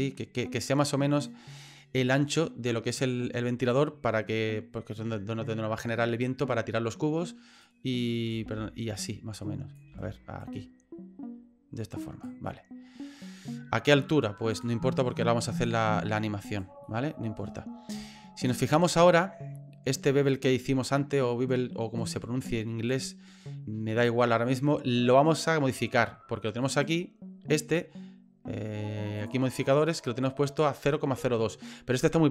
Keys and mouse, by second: 7.6 click, 8.4 ctrl+z, 8.9 click, 9.9 ctrl+z, 10.4-12.2 drag, 12.4 middle click, 14.6-16.6 drag, 16.8 middle click, 18.1 shift+middle click, 19.1 middle click, 26.6 right click, 29.2 click.